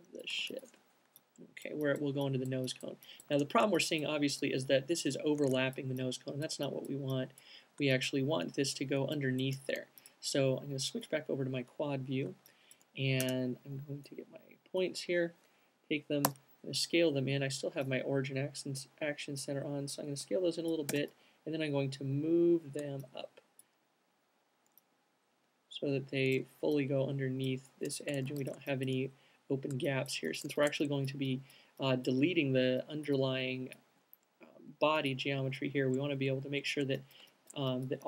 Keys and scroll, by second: 0.7 c, 9.8 alt+q, 13.6 space, 16.6 r, 21.2 w, 22.5 alt+w, 27.5 alt+q, 30.8 alt+shift+q, 35.5 typing.